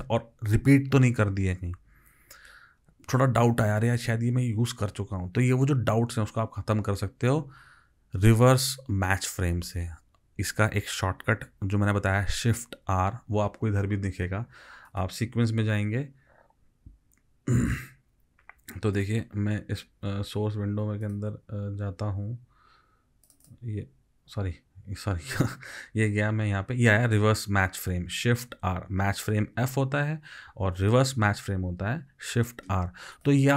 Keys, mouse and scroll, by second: 23.5 double click.